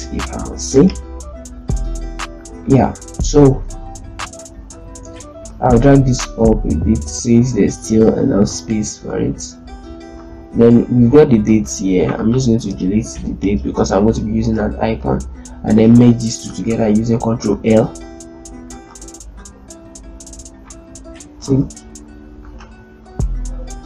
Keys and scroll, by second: 0.4 z, 3.4 ctrl+space, 12.5 BackSpace, 14.2 ctrl+space, 17.2 ctrl+l, 19.3 ctrl+a, 22.3 ctrl+shift+z, 23.0 ctrl+shift+l.